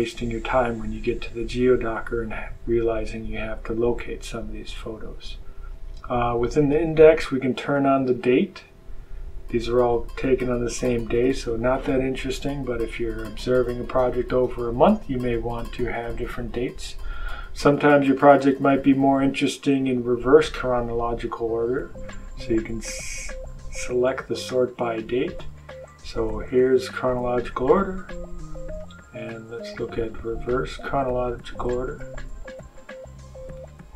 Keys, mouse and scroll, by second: 7.6 click, 18.0 click, 19.1 click, 23.8-24.7 scroll down 1, 25.4-26.0 scroll up 1, 26.3-27.1 scroll up 2, 28.7 click, 31.9 click, 32.7 click.